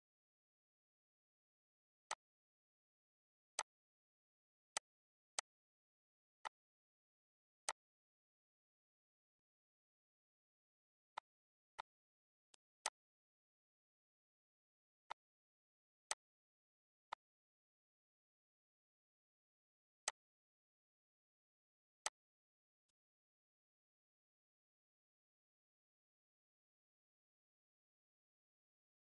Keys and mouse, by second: 1.9 click, 2.6 ctrl+s, 3.4 click, 4.1 shift+click, 4.7 shift+click, 5.3 click, 6.5 click, 7.6 click, 8.1 ctrl+s, 9.0 click, 9.4 shift+click, 10.2 click, 11.1 click, 11.8 click, 12.5 click, 12.9 shift+click, 15.1 shift+click, 16.1 click, 17.2 click, 20.1 click, 20.4 ctrl+s, 22.1 click, 22.9 click, 24.4 click, 25.4 ctrl+s.